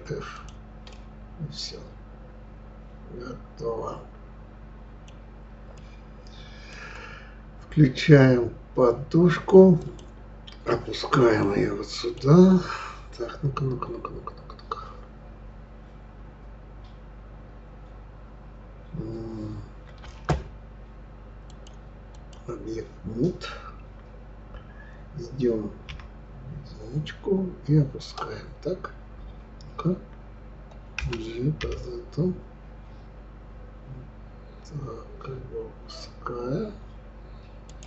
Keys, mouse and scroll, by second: 0.3 click, 0.9-3.9 middle drag, 5.7-8.8 middle drag, 9.8 click, 11.4-14.4 middle drag, 21.5-24.5 drag, 25.9 KP_1, 31.0 g.